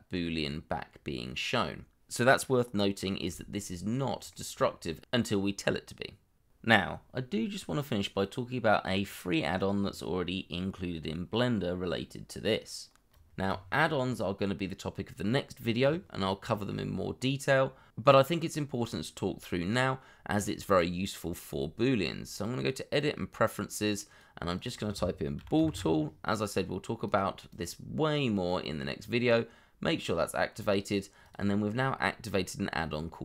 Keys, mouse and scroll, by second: 0.9-1.2 scroll down 1, 1.2 middle click, 3.0-4.7 scroll down 1, 5.3-5.6 scroll down 1, 5.8 shift+middle click, 6.9 shift+middle click, 9.3 shift+middle click, 9.6-9.9 scroll up 1, 9.9 shift+middle click, 10.2 scroll up 1, 10.5 middle click, 11.2 scroll down 2, 11.5 shift+middle click, 25.4 b, 25.5 o, 27.4 double click.